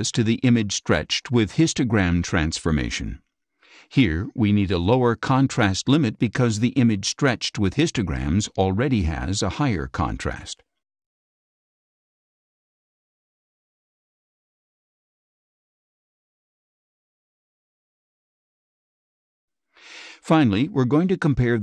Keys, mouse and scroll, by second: 0.5 click, 3.2 click, 6.8 click, 10.0 click, 12.2 click, 20.2 click, 21.5 click.